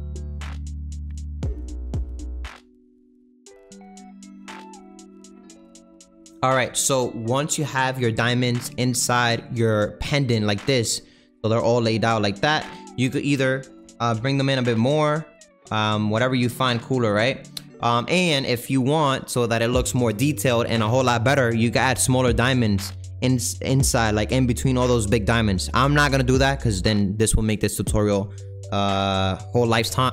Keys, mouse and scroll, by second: 0.1 click, 0.2 g, 0.3 Left, 0.4 Left, 0.5 Left, 1.0 scroll down 3, 1.1 Left, 1.4 Left, 2.0 ctrl+j, 2.3 right click, 2.6 ctrl+a, 3.6 click, 3.8 click, 4.6 ctrl+a, 4.8 right click, 5.0 click, 5.3-13.0 middle drag, 13.0 click, 13.8 g, 16.4 click, 16.6-30.1 middle drag.